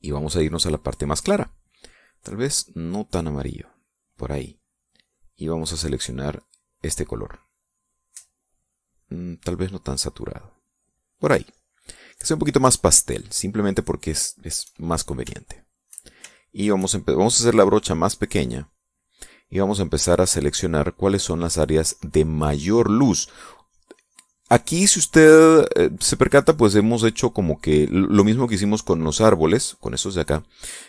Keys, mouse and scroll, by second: 0.3 click, 2.3-3.9 drag, 5.4-8.7 drag, 9.3-11.6 drag, 11.9 middle click, 12.5 middle click, 13.1-15.1 shift+drag, 15.6 shift+click, 16.6 shift+click, 17.5-19.7 shift+drag, 19.9-21.8 drag, 21.8-23.0 drag, 23.0 click, 24.0-26.6 drag, 28.0-29.9 drag.